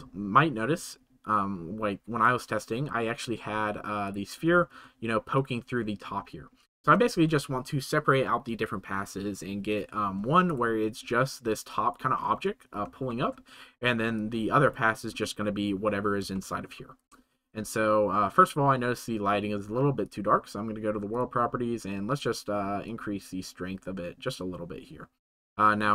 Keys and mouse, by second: 4.0 click, 5.3 click, 11.4-11.9 drag, 13.3-13.7 drag, 14.1-14.7 drag, 16.3-16.6 shift+middle drag, 24.4-25.9 drag.